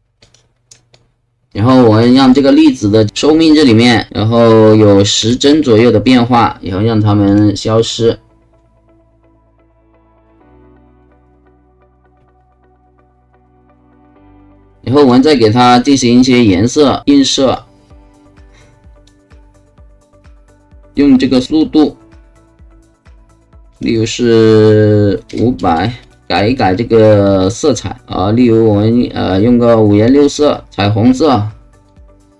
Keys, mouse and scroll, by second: 0.3 click, 0.9-2.2 drag, 3.5 alt+click, 4.1 BackSpace, 5.2 KP_1, 5.6 KP_0, 5.7 click, 7.3 click, 7.8 click, 14.7 alt+click, 15.3 alt+right click, 17.5-19.1 alt+drag, 21.6 click, 23.7 click, 25.7 KP_0, 26.0 click, 27.5 middle click, 28.8 middle click, 29.8 middle click, 31.9 click.